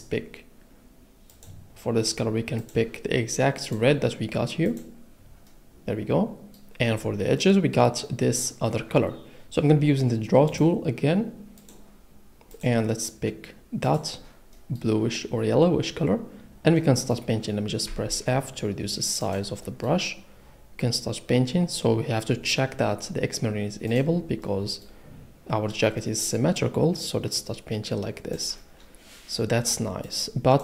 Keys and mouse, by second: 1.3 click, 3.6 click, 4.7 click, 10.5 click, 11.6 click, 13.8 click, 17.8 f, 19.2 click, 23.9 click, 27.1 click.